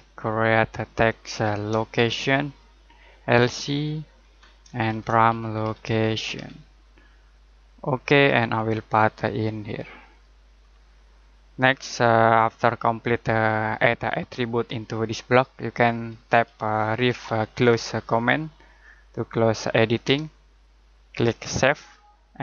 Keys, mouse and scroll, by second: 1.9-3.6 typing, 4.2 Tab, 4.6-6.8 typing, 7.8 click, 8.5-10.0 scroll up 1, 10.0 click, 10.6-11.2 scroll down 1, 11.2 middle click, 11.7-12.1 scroll down 1, 12.1 middle click, 16.6-18.4 typing, 20.0 space, 21.5 click.